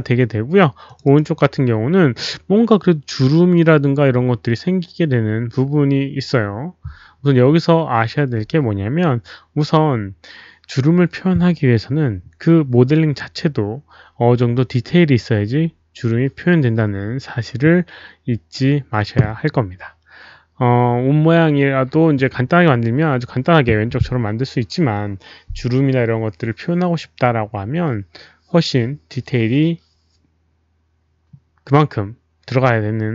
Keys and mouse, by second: 0.8 click, 1.0 click, 11.6 click.